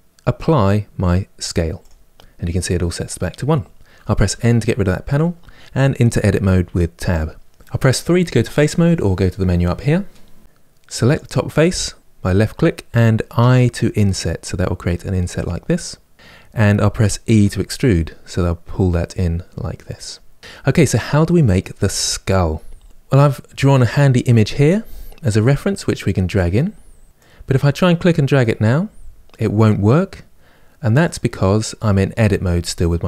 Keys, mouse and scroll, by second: 4.0 n, 6.3 Tab, 8.0 3, 10.8 click, 13.1 i, 17.0 e, 20.4-22.8 middle drag.